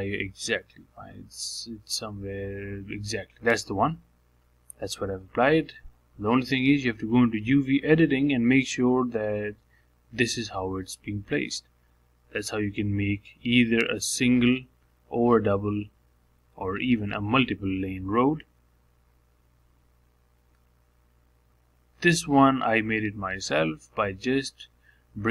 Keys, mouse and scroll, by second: 7.5 click, 9.4-14.8 drag, 17.2 click, 17.8-20.6 shift+middle drag, 20.6-21.0 scroll down 1, 21.0-22.1 middle drag, 22.1 scroll up 2, 23.1 click, 23.3-25.3 middle drag.